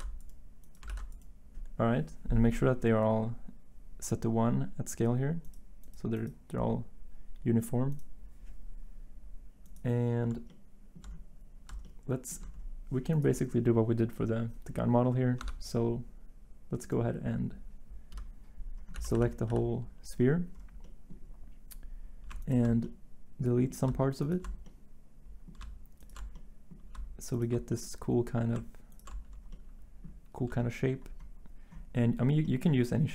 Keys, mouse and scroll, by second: 15.4 Tab, 18.9 a, 19.1 a, 19.5 a.